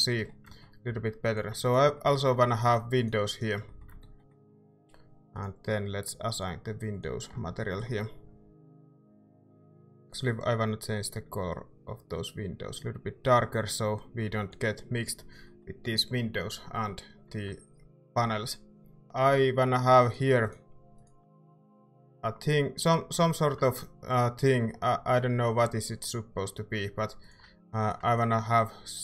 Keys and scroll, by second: 0.9 a, 4.2 e, 7.3 Tab, 8.1 a, 14.3 ctrl+s, 19.0 Tab, 25.0 e, 27.5 a.